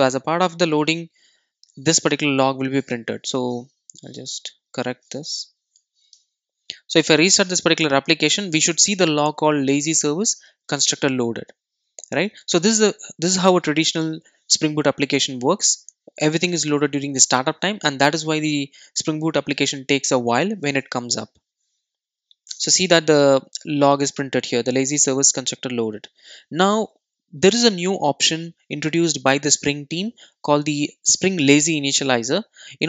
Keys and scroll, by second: 5.6 alt+super+l, 8.1 super+r.